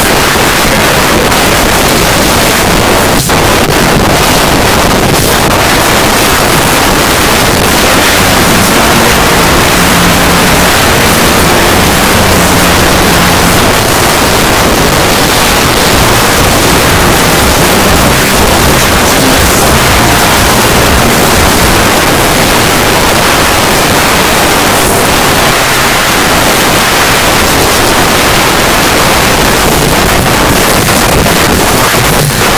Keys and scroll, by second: 1.2 Up, 1.3 Up, 1.8 Up, 1.9 Return, 13.7 Page_Down, 21.9 Page_Down.